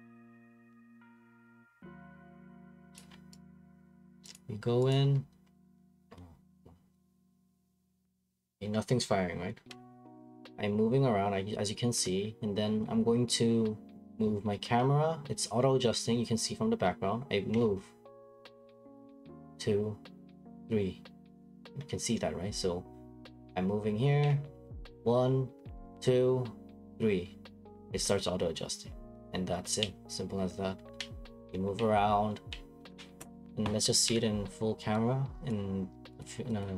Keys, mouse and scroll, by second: 0.5 click, 0.6 click, 3.0 click, 3.1 click, 3.1 click, 3.5 click, 4.3 click, 4.3 scroll, 4.9 click, 6.1 Escape, 7.0 click, 8.1 click, 10.1 click, 34.0 Escape, 35.5 click.